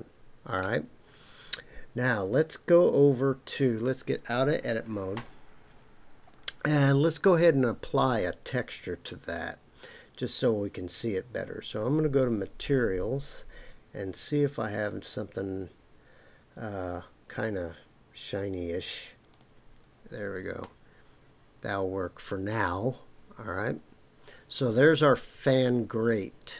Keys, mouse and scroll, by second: 5.1 Tab, 12.6 click, 14.7-19.4 drag, 20.6-26.5 middle drag.